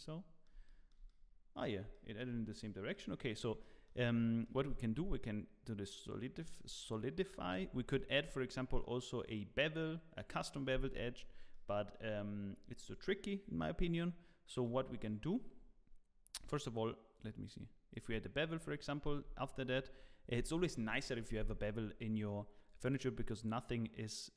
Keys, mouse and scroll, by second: 0.1 scroll down 2, 0.6 shift+middle click, 1.0 middle click, 1.9 shift+middle click, 2.9 middle click, 3.6 shift+middle click, 4.1-4.4 scroll up 3, 4.4 middle click, 7.5 scroll down 3, 7.8 shift+middle click, 15.2 click, 15.2 middle click, 16.4 click, 17.6 click, 18.3 scroll down 1, 18.6 middle click.